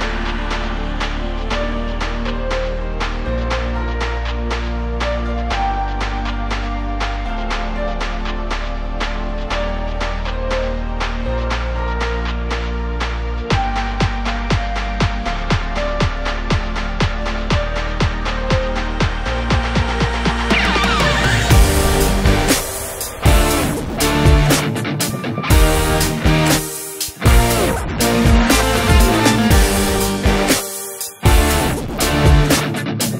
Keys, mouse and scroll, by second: 10.0 click, 10.6 x, 11.4 click, 11.6 click, 11.8 x, 17.0 click, 17.3 ctrl+i, 18.0 x, 19.3-21.9 middle drag, 21.9-23.0 drag, 23.1-24.3 middle drag, 23.5 z, 24.3 click, 24.9-26.0 drag, 25.4 KP_0, 25.5 KP_Enter, 26.1-27.3 middle drag, 27.3 scroll down 1, 28.0 ctrl+s, 28.3 scroll up 1, 28.5 shift+middle click, 30.4 KP_7, 30.8 shift+middle click, 31.1-31.7 scroll down 1, 31.7 shift+middle click, 32.3 z, 32.7-33.0 scroll up 1, 33.0-33.1 scroll down 1.